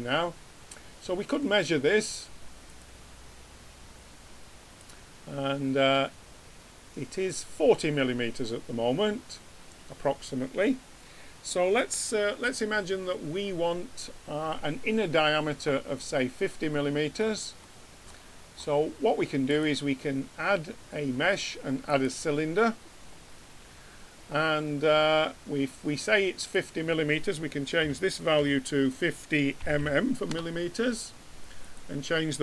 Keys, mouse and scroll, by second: 2.6-4.4 drag, 18.8-21.3 drag, 26.4-28.3 drag, 29.8 m, 31.6-32.4 drag.